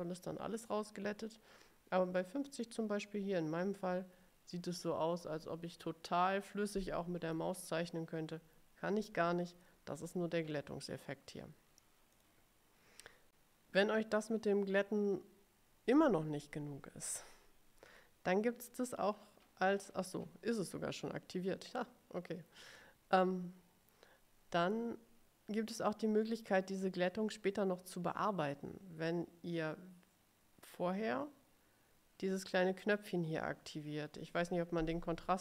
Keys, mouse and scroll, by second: 2.6 click, 12.3 click.